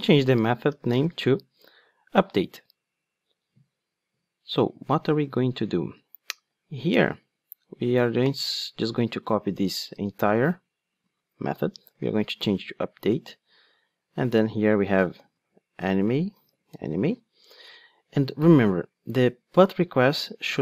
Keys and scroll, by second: 6.9 super+b, 8.4 super+c, 9.9 super+v, 15.8 Return.